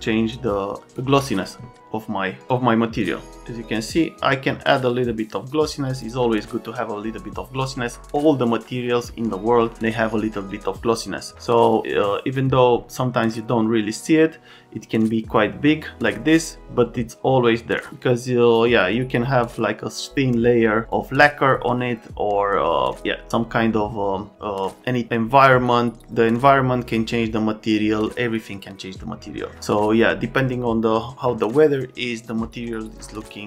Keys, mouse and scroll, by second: 5.7 click, 11.7 click, 15.3-19.3 drag.